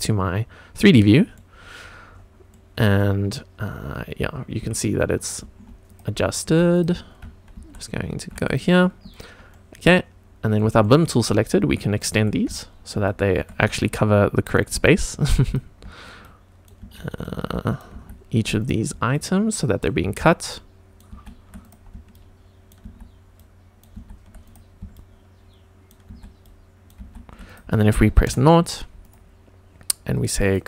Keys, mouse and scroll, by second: 0.9-1.3 middle drag, 1.5-2.3 scroll down 6, 2.4-2.9 middle drag, 3.7 scroll down 2, 4.6 q, 6.4 q, 9.1 click, 9.5-10.5 middle drag, 10.8 shift+middle click, 11.3 shift+right click, 12.9 shift+e, 13.7 shift+right click, 14.7 shift+e, 15.4 click, 16.2 shift+right click, 16.8 shift+e, 17.2 shift+right click, 17.9 shift+e, 18.5 click, 19.1 shift+right click, 20.0 shift+e, 20.5 shift+right click, 21.1 shift+e, 21.6 click, 22.1 shift+right click, 22.8 shift+e, 23.3 shift+right click, 23.9 shift+e, 24.4 click, 24.9 shift+right click, 26.1 shift+e, 26.4 shift+right click, 27.0 shift+e, 27.4 click, 28.2 KP_0, 29.0 click, 30.4 click.